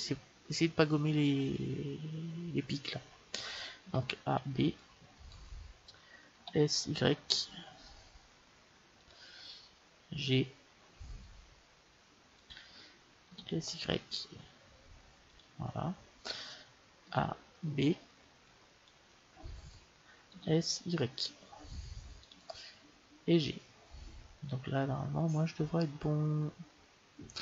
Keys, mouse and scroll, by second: 3.7 a, 4.1 b, 6.3 s, 10.1 g, 13.2 s, 16.9 a, 17.6 b, 20.3 s, 23.3 g.